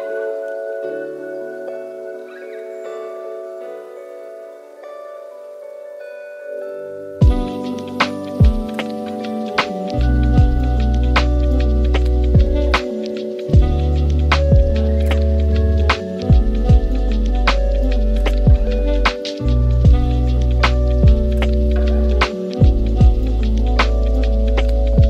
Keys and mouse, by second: 0.9 click, 3.5 middle click, 4.1 click, 4.4 middle drag, 4.9 s, 6.0 middle click, 6.6 g, 8.1-8.9 middle drag, 9.4 g, 11.0 s, 11.9 shift+d, 13.7 r, 15.1 shift+click, 15.4-15.8 middle drag, 16.1 shift+d, 18.3-18.9 middle drag, 19.1 shift+middle drag, 19.6-20.0 middle drag, 21.0-21.4 middle drag, 22.1 click, 22.6 shift+middle click, 24.1 shift+a.